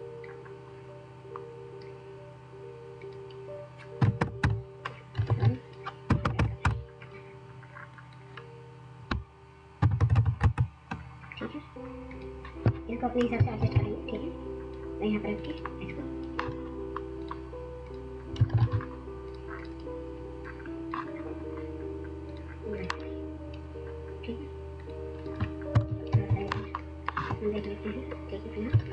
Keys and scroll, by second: 3.8-6.7 typing, 5.3 ctrl+z, 9.5-10.5 typing, 18.5 ctrl+z, 18.5 ctrl+a, 25.8 ctrl+0, 26.1-27.3 w, 28.7 ctrl+space.